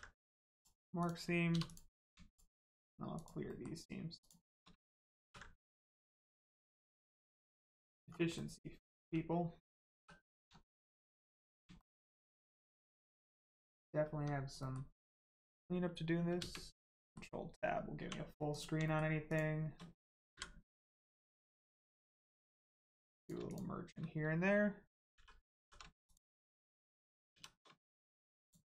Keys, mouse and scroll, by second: 0.5 click, 1.5 2, 1.6 click, 2.2 shift+click, 3.4 shift+middle click, 4.1 shift+click, 5.2 ctrl+e, 6.3 click, 7.0-7.3 scroll down 1, 7.4 middle click, 8.9 Tab, 9.9 3, 10.2 click, 10.7 shift+middle click, 11.2 middle click, 11.3 middle click, 11.7 shift+middle click, 12.0 middle click, 12.1 middle click, 12.4 scroll up 1, 12.9 shift+middle click, 14.1 middle click, 14.5 middle click, 16.3 ctrl+space, 16.9 middle click, 17.0 middle click, 17.6 scroll down 1, 17.9 1, 18.5 click, 18.8 shift+middle click, 19.3 shift+click, 20.3 m, 22.4 click, 25.6 r, 26.0 click, 27.0 shift+click, 27.3 shift+r, 28.4 click.